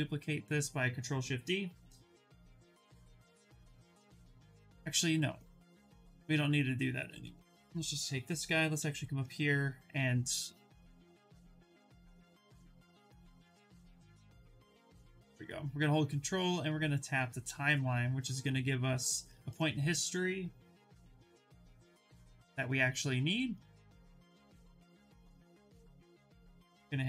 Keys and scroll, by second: 12.1 ctrl+shift+z, 12.2 ctrl+shift+z, 12.4 ctrl+shift+z, 25.3 shift+f, 25.9 2.